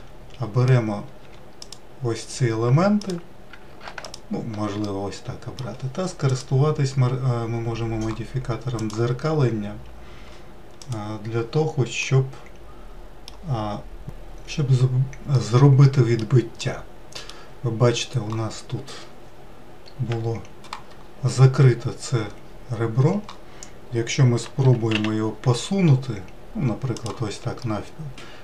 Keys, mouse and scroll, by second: 1.2 2, 1.6 click, 3.0 click, 4.0 alt+click, 4.8-6.3 middle drag, 8.9 click, 10.8 click, 12.0-14.0 middle drag, 15.3-17.9 middle drag, 17.9-19.2 scroll up 2, 20.1 KP_Decimal, 21.0-24.4 scroll down 3, 24.6 g, 27.6-28.4 middle drag.